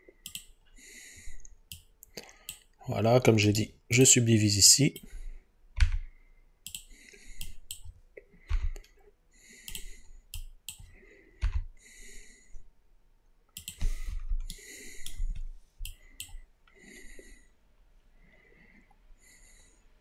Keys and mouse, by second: 0.3 click, 3.5 right click, 5.8 g, 6.7-8.5 drag, 8.5 g, 9.7-11.5 drag, 11.5 g, 13.6 click.